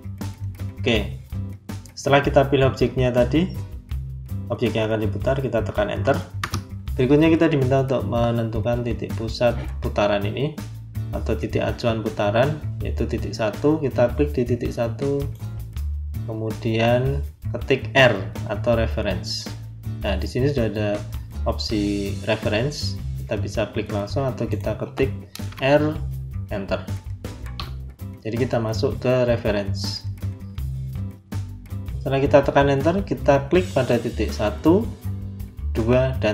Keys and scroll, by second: 6.3 Return, 25.4 r, 27.5 Return.